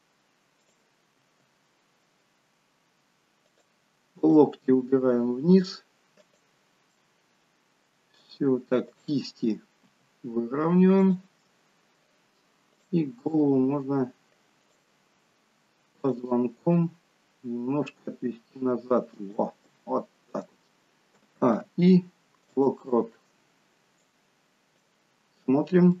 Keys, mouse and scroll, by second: 0.6 click, 1.1 r, 4.2 click, 4.7 r, 6.9 middle click, 6.9 scroll up 1, 8.9 click, 10.0 r, 11.4 middle click, 12.7 click, 13.2 r, 16.0 click, 16.7 r, 19.7 middle click, 21.1 a, 21.5 i, 24.2 click, 25.2-26.0 scroll down 5.